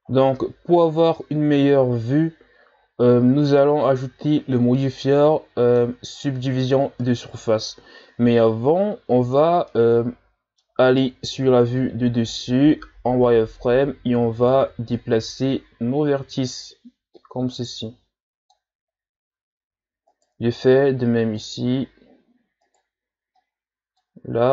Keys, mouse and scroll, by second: 0.4-3.4 middle drag, 6.1-6.5 shift+scroll up 5, 8.1-8.9 scroll up 1, 8.9 Tab, 9.7-11.3 middle drag, 11.3 KP_7, 12.9 z, 14.4 right click, 14.8 b, 16.3-17.1 scroll down 2, 17.1-18.9 drag, 18.9-19.8 scroll up 3, 20.1 right click, 20.4 b, 22.6 right click, 22.9 b.